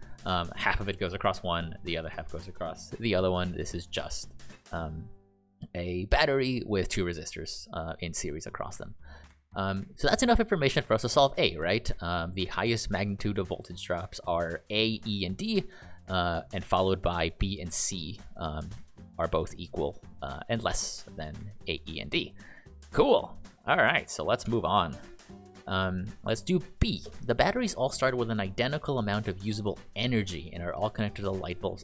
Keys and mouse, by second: 22.5 click, 22.7 click, 24.8 ctrl+click.